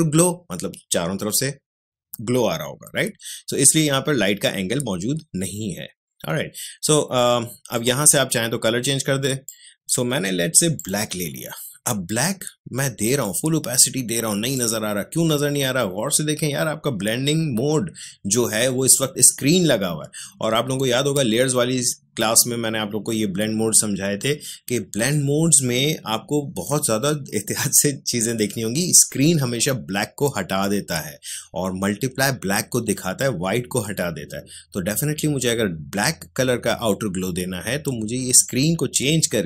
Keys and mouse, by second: 7.7-10.7 drag, 13.2-17.1 drag, 38.4-39.4 drag.